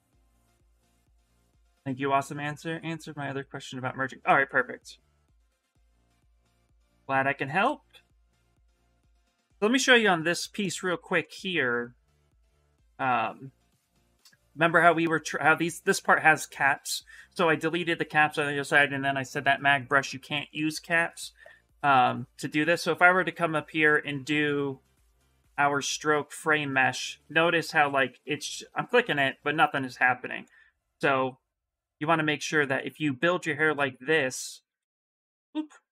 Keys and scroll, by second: 1.0 s, 10.9 s, 32.9 s.